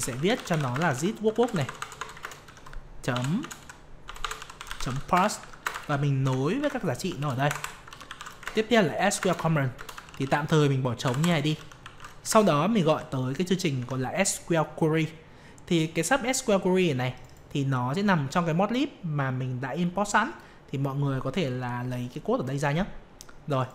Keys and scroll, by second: 2.2 ctrl+space, 6.6 ctrl+v, 8.4 ctrl+space, 13.1 ctrl+space.